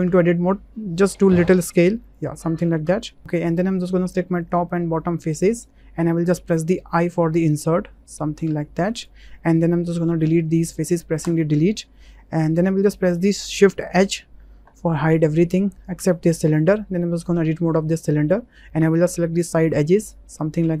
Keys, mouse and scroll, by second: 0.0 Tab, 1.4 s, 2.0 click, 2.8 Tab, 4.4 click, 4.6 middle click, 5.6 middle click, 6.9 i, 10.4 Delete, 12.5 Tab, 13.9 shift+h, 16.6 Tab, 17.6 shift+click, 18.0 click, 18.8 2, 19.7 alt+shift+click.